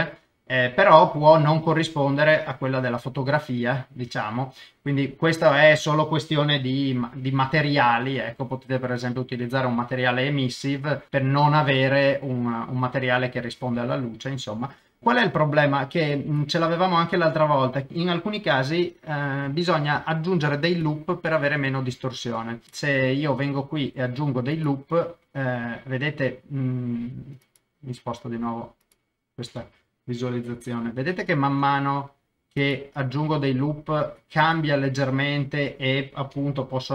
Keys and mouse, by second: 0.3 click, 0.5 middle click, 2.3 click, 2.7-4.0 middle drag, 4.0 KP_0, 6.6 g, 11.6 g, 13.3 click, 14.8 middle click, 15.8 middle click, 16.4 click, 16.7-17.9 middle drag, 19.5 shift+middle click, 20.0 ctrl+middle click, 21.1 middle click, 22.0 shift+middle click, 22.6 ctrl+KP_0, 23.3 ctrl+r, 27.4 click, 31.5 ctrl+r, 34.4 click.